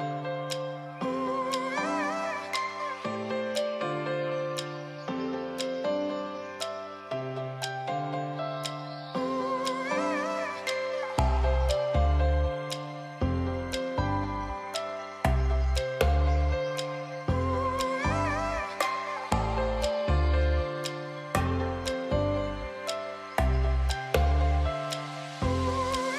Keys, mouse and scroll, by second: 1.2-13.8 drag, 18.7 click, 23.9 alt+right click, 24.4-25.3 alt+right click, 25.7 alt+right click.